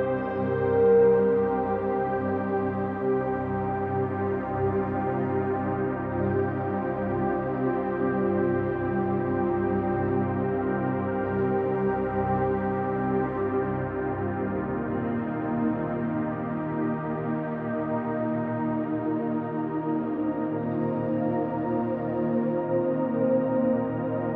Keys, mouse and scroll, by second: 1.5 alt+click, 2.5-3.9 alt+drag, 4.5-5.7 drag, 10.4 alt+click, 11.5 alt+click, 14.1 click, 15.9 drag, 16.8 click, 18.0-19.1 drag, 20.3 click, 22.6 ctrl+z.